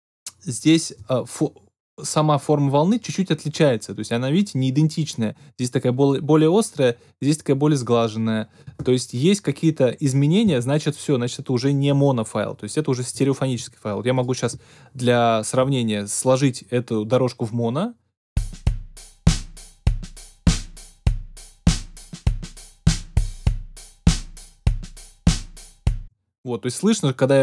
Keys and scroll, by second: 18.3 space, 25.9 space.